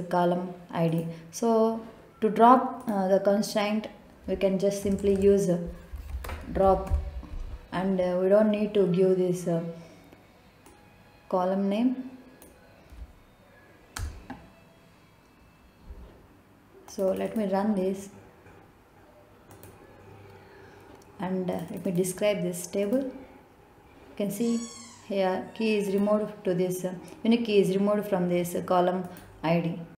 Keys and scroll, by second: 5.7-8.2 typing, 14.8 BackSpace.